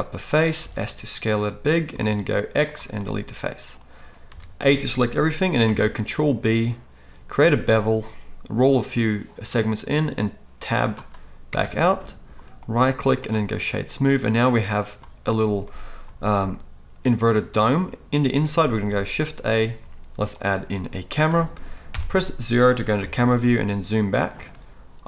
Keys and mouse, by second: 0.6 s, 1.9 x, 4.2 a, 5.6 ctrl+b, 11.5 Tab, 12.6 click, 13.3-25.0 right drag, 18.9 shift+a, 21.9 KP_0, 23.0 g.